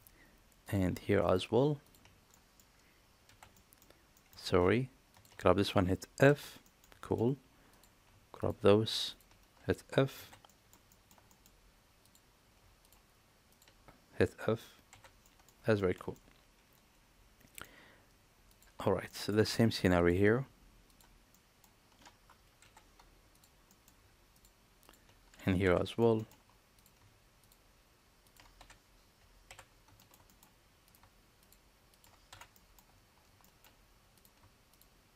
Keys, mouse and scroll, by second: 1.3 shift+click, 2.3 middle click, 3.3 f, 3.6 middle click, 4.1 middle click, 4.4 ctrl+z, 6.3 f, 6.6 middle click, 7.0 shift+middle click, 7.7 click, 8.4 shift+click, 10.2 f, 10.5 middle click, 10.9 shift+middle click, 11.3 middle click, 12.0 click, 12.8 shift+click, 13.5 shift+click, 14.9 f, 15.2 middle click, 15.8 shift+middle click, 16.2-17.6 middle drag, 19.1 middle click, 20.0 shift+click, 20.9 shift+click, 21.3 middle click, 22.6 f, 23.7 middle click, 24.3 shift+click, 25.9 middle click, 26.2 shift+middle click, 28.3 shift+click, 29.5 f, 30.0 shift+middle click, 30.3 middle click, 30.8 click, 31.4 shift+click, 32.5 middle click, 32.5 f, 33.4 shift+middle click, 34.7 shift+click.